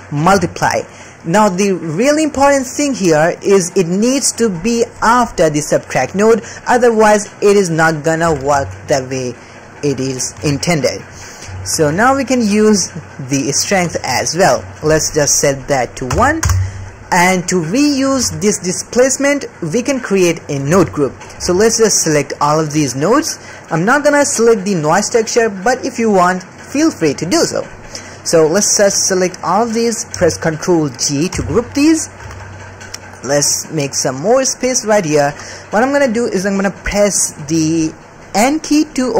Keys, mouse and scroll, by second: 3.1 middle click, 4.0 click, 5.2 click, 6.4 click, 6.6 click, 8.2 g, 10.3 alt+a, 11.1 middle click, 11.5 ctrl+middle click, 12.1-14.4 shift+drag, 14.9-16.4 drag, 17.8 middle click, 18.1 alt+a, 19.6 middle click, 20.7 alt+a, 21.1 middle click, 21.3 c, 23.3 middle click, 24.5 middle click, 27.6 middle click, 28.1 middle click, 28.6 middle click, 29.3 middle click, 31.3 ctrl+g, 32.0 middle click, 32.2 alt+a, 33.4-34.8 drag, 35.4 middle click, 36.1 middle click, 37.0-38.1 middle drag.